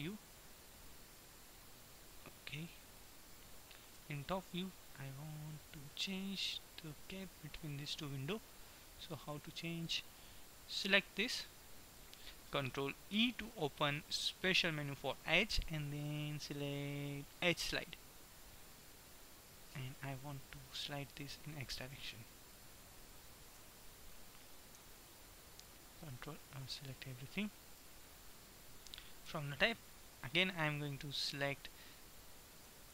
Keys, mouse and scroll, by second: 4.1 KP_7, 4.2-6.2 middle drag, 9.2 a, 11.1 b, 13.2 ctrl+e, 20.7-22.7 drag, 23.6 a, 24.7 b, 26.2-27.6 middle drag, 29.4 KP_7, 32.7 shift+e.